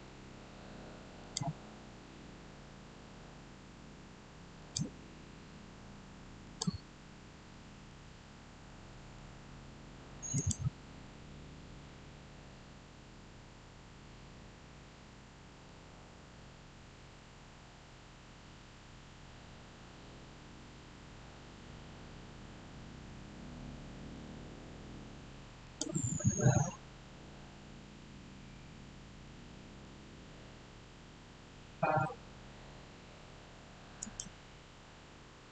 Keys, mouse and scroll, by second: 1.1 click, 4.5 click, 7.4 middle click, 8.1 scroll up 1, 8.6-10.2 middle drag, 10.2 click, 15.6 click, 15.9 shift+middle click, 16.0 shift+scroll down 1, 25.5 click, 29.2-32.0 middle drag, 33.9 click.